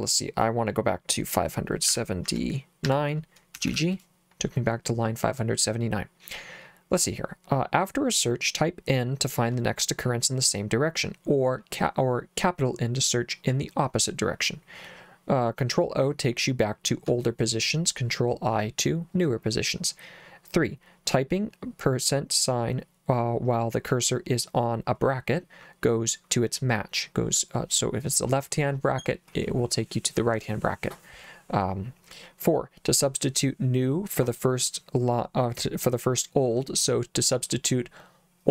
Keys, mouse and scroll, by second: 1.9-3.7 typing.